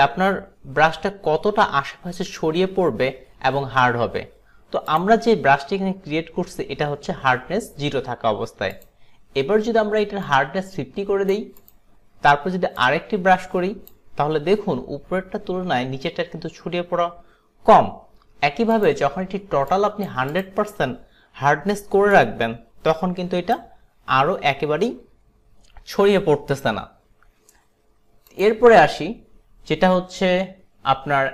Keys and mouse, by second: 5.0 click, 8.8 click, 10.3 click, 11.6 click, 12.9 click, 18.8 click, 20.4 click, 22.2 click, 28.4 click.